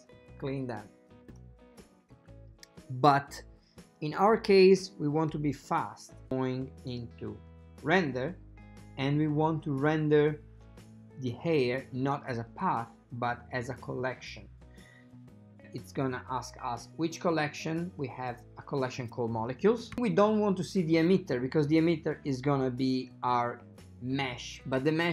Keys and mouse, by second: 7.0 click, 12.6-14.6 drag, 17.5 click, 19.1 click.